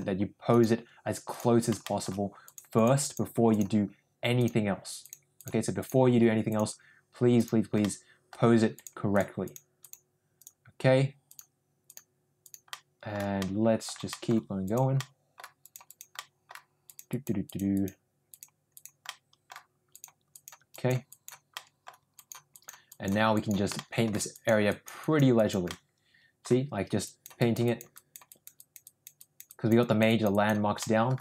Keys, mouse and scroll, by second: 0.4 click, 1.2 click, 1.7 shift+middle click, 2.4 click, 2.7 click, 3.0 click, 3.4 click, 4.3 click, 4.9 click, 5.3 click, 5.7 click, 6.4 click, 7.3 click, 7.7 middle click, 8.7 click, 9.1 click, 9.4 click, 9.7 click, 10.3 click, 11.2 click, 11.8 click, 12.3 click, 12.6 middle click, 13.3 middle click, 14.0 middle click, 14.6 click, 14.9 middle click, 15.5 click, 15.8 click, 16.1 middle click, 16.8 click, 17.0 click, 17.4 click, 17.7 click, 18.2 click, 18.6 click, 19.0 middle click, 19.8 click, 20.2 click, 20.6 click, 21.0 click, 21.5 middle click, 22.1 click, 22.5 click, 22.8 click, 23.3 click, 23.7 shift+middle click, 24.3 click, 24.7 click, 25.0 click, 25.3 click, 25.6 middle click, 27.0 click, 27.4 click, 27.6 click, 27.9 click, 28.2 click, 28.5 click, 28.8 click, 29.2 click, 29.4 click, 29.8 click, 30.0 click, 30.8 middle click.